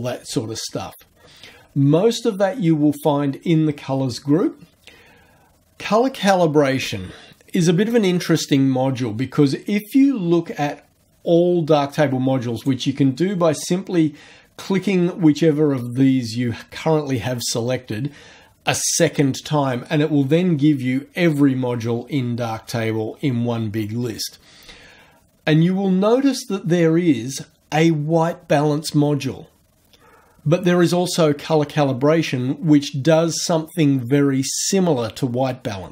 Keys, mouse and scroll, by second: 2.2 click, 12.6 click, 20.1-21.0 scroll down 1, 21.0-22.1 scroll up 1, 22.1-22.7 scroll down 1.